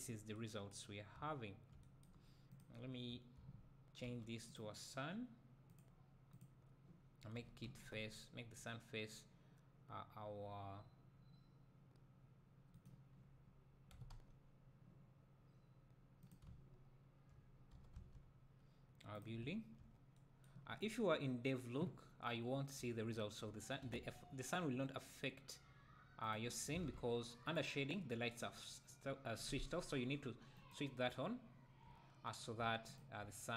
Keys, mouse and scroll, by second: 1.2 `, 2.9 scroll down 2, 3.1 `, 4.1 g, 4.6 click, 6.3 click, 7.4 r, 12.9 right click, 13.1-13.9 scroll down 1, 14.0 r, 14.6-19.1 middle drag, 16.3 click, 16.5 `, 17.8 r, 19.2 click, 19.4 `, 20.6-20.9 scroll up 1, 22.8 `, 23.9 r, 26.3 click, 26.8 alt+a, 27.5-33.0 drag, 31.8 `, 33.2 `.